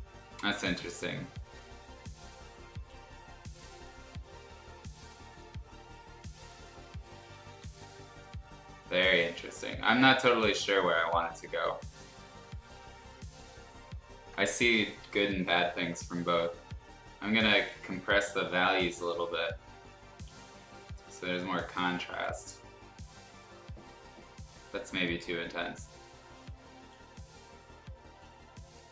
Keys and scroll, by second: 7.4 ctrl+z, 22.6 l.